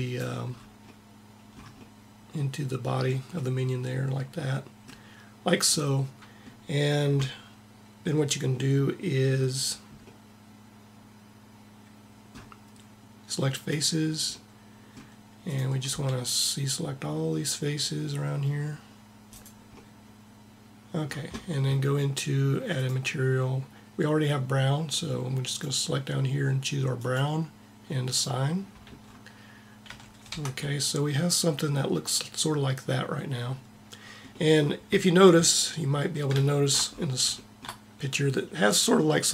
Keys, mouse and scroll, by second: 0.8 middle click, 13.4-16.8 drag, 15.6 c, 22.5-24.2 drag, 24.3-25.2 scroll up 1, 29.6 a, 30.0 Tab.